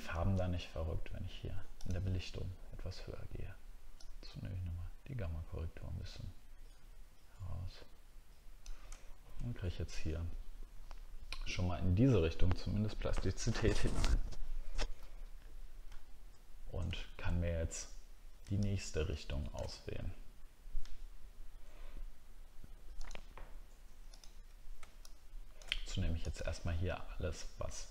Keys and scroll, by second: 9.0 alt+scroll down 2, 15.9 alt+scroll up 1.